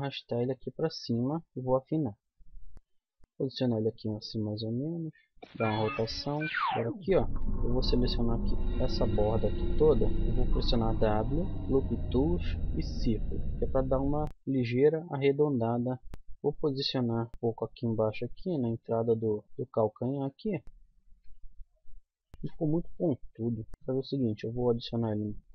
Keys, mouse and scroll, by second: 1.7 s, 2.2 middle click, 3.2 g, 4.3 r, 6.5 z, 6.6 a, 10.5 w, 16.1 KP_1, 16.1 z, 17.3 g, 19.5-20.5 middle drag, 19.5 z, 20.6 middle click, 21.2 KP_1, 22.3 middle click, 22.8 middle click, 23.5 z, 23.7 a, 24.9 click, 25.2 c.